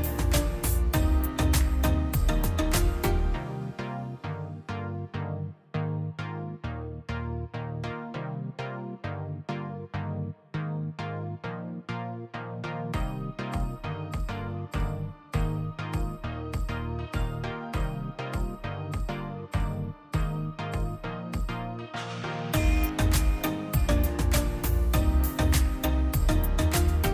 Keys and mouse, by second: 0.0 middle click, 2.3-3.0 middle drag, 3.0 click, 3.3 middle click, 3.5 middle click, 3.8 middle click, 4.4 ctrl+shift+click, 5.3 drag, 8.0-8.7 drag, 9.3-10.0 drag, 10.0-11.6 middle drag, 11.8 click, 12.9 middle click, 13.8 click, 14.2 middle click, 14.8 ctrl+shift+click, 15.7 middle click, 16.0-17.1 middle drag, 17.1-17.9 drag, 19.4 click, 19.8 click, 20.5 click, 21.0-21.5 drag, 21.5 middle click, 21.9 middle click, 22.2 ctrl+shift+click, 23.2-24.7 middle drag, 24.7 click, 25.3 click, 25.5-26.3 drag, 27.0-27.1 drag.